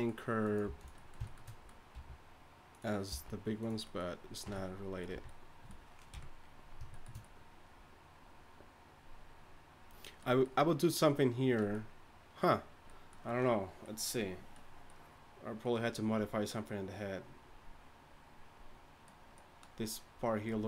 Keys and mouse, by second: 0.6 g, 1.9 r, 2.7 g, 3.1 g, 4.4 Tab, 4.4 r, 5.1 a, 6.1 KP_1.